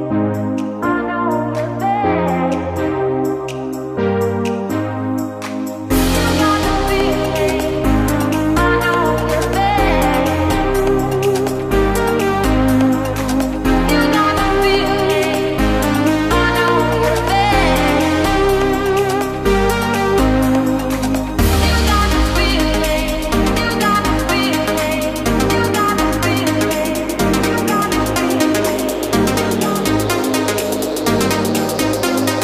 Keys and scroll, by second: 2.1 ctrl+v, 2.2 ctrl+space, 2.7 ctrl+shift+[, 2.9 ctrl+space, 15.4 ctrl+3, 15.9 ctrl+alt+3, 16.3 ctrl+space, 17.3 ctrl+;, 18.5 ctrl+space, 25.5 ctrl+x, 26.0 ctrl+v, 27.8 ctrl+space, 31.6 ctrl+space.